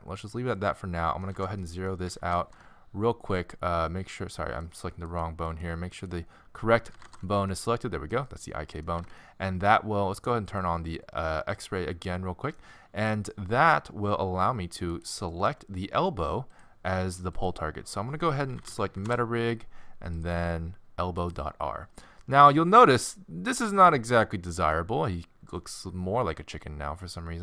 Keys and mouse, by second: 1.3 alt+g, 1.7 middle click, 2.2 alt+r, 2.4 alt+g, 6.9 alt+r, 7.0 alt+g, 7.5 middle click, 9.1 alt+z, 12.1 click, 12.3 middle click, 12.5-15.0 drag, 15.0 right click, 15.4-16.7 middle drag, 16.5-19.2 drag, 16.5 right click, 20.1-22.2 drag, 25.3 middle click, 26.7 middle click, 27.2 middle click.